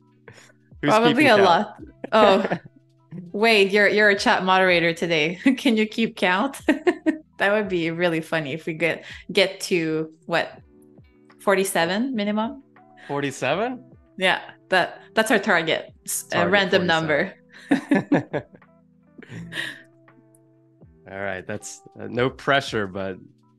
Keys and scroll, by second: 1.5 shift+m, 3.0 a, 4.4 super+c, 4.8 super+z, 6.3 BackSpace, 7.4 super+f, 17.5 z, 19.4 a, 19.8 space, 21.1 super+-, 21.7 space.